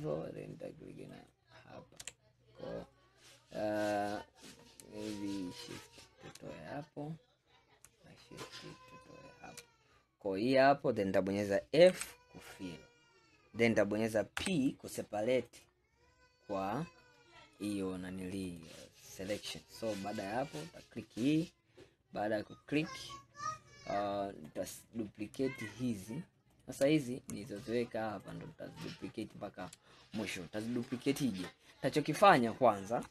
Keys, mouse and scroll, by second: 1.2 alt+shift+click, 3.1-3.9 scroll up 3, 3.9-5.6 middle drag, 5.6 shift+click, 6.6-7.0 scroll down 2, 8.9 shift+click, 9.7-10.2 scroll down 2, 10.2 scroll up 1, 10.7-12.0 scroll up 3, 12.0 f, 12.9 scroll down 3, 13.5-14.4 scroll up 1, 14.4 p, 17.7-19.6 drag, 19.6-20.2 scroll up 1, 20.2 click, 24.5 click, 25.7 shift+click, 26.6 shift+click, 27.5 shift+click, 28.2 shift+click, 28.8 shift+click, 29.3 shift+click, 30.3 scroll down 2, 31.0-33.1 scroll up 2.